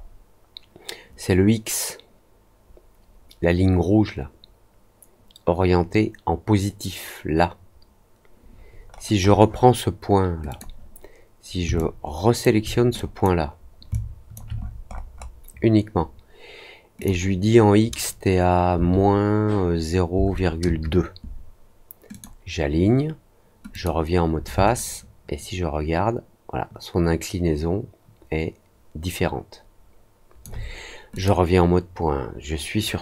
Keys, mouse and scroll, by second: 8.8 middle click, 8.8-9.6 scroll up 6, 9.2 middle click, 9.4 middle click, 10.4 click, 11.7 alt+click, 12.9 click, 13.9 alt+click, 14.5 middle click, 14.8 middle click, 15.1 middle click, 16.9 click, 22.0 click, 23.6 click, 24.7-30.4 alt+drag, 31.1 click.